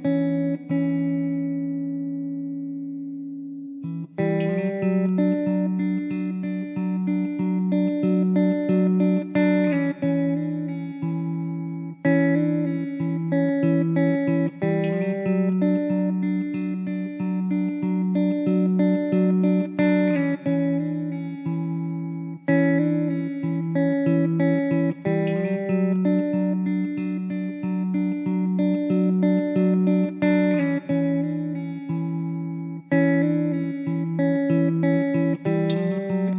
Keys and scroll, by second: 6.2 ctrl+z, 6.9 z, 20.0 Tab, 20.3 Tab, 21.0 Tab, 21.8 l, 22.9 l.